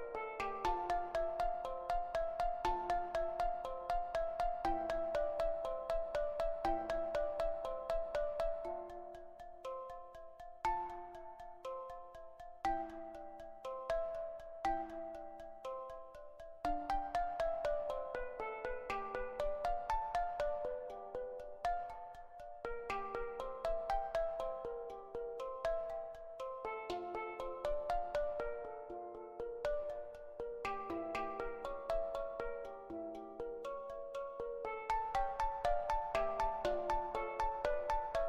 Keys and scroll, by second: 18.4 ctrl+z, 24.3-25.6 typing.